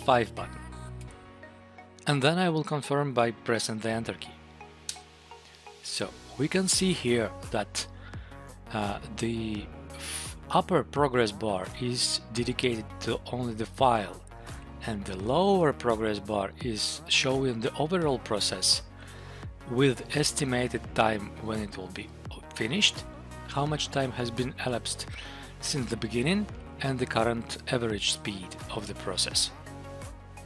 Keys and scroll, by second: 1.0 F5, 4.8 Return.